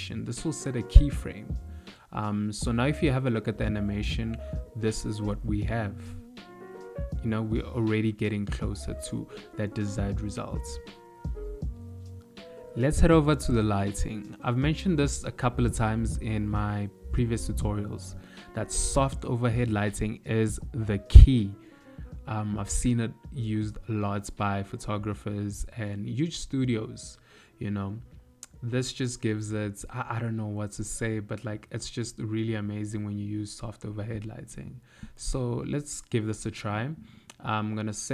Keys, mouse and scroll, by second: 0.3 space, 7.9 space, 10.3 click, 11.4 middle click, 14.0 shift+a, 18.8 KP_Decimal, 20.3 ctrl+middle click, 22.4 ctrl+middle click, 23.4 click, 27.7 click, 33.2 click, 34.5 middle click, 34.5 KP_7, 34.8 click, 35.4 click, 37.6 click.